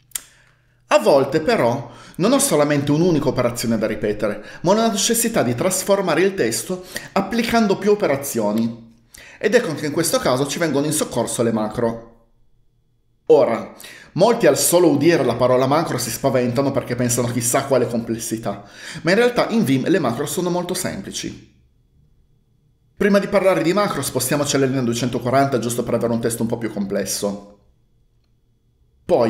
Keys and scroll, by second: 24.7-26.0 typing.